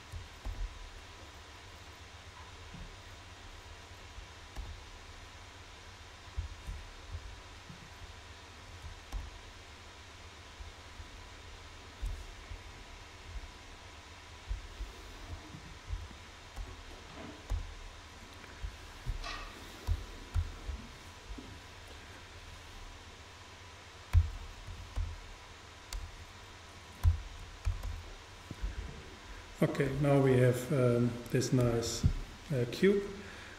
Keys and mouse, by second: 0.5 g, 4.3-6.0 right drag, 4.6 g, 6.5-7.8 drag, 7.8-9.6 super+right drag, 9.2 super+g, 10.7-12.5 drag, 15.6-17.4 super+right drag, 16.6 super+g, 18.8-20.4 drag, 19.9 s, 27.1 s, 29.0-30.7 drag.